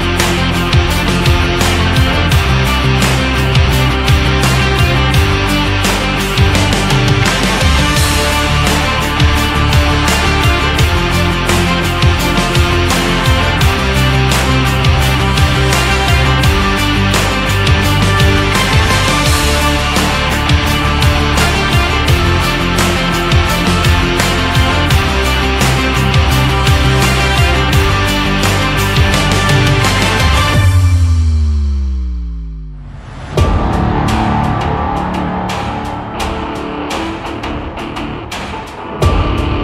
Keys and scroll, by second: 11.2 Down.